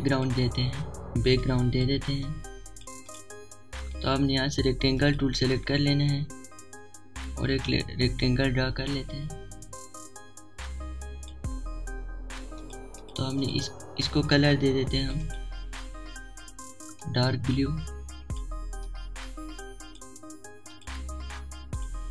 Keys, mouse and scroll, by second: 2.8 right click, 3.9 click, 7.1-19.7 drag, 7.1 typing, 11.5 typing, 21.8 right click.